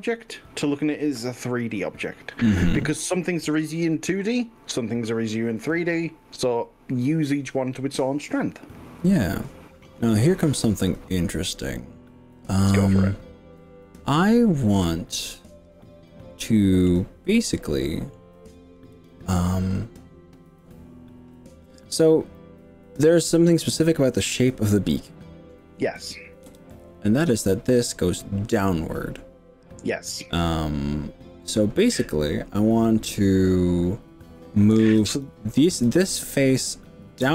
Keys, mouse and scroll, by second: 0.1 click, 1.7-2.8 middle drag, 3.6 click, 8.2-17.0 middle drag, 17.4-18.2 middle drag, 19.0 click, 26.5 KP_3, 35.2 click, 36.0 click.